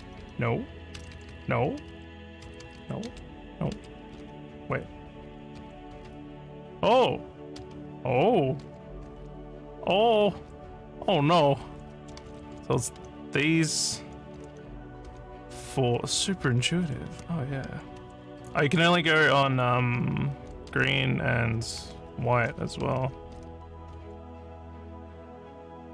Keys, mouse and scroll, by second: 0.0-1.3 typing, 2.6 x, 3.8 v, 4.1 f, 5.3 e, 5.6 r, 6.2 z, 7.6 z, 8.6 a, 9.1 q, 10.1-23.4 typing, 25.3-25.9 typing.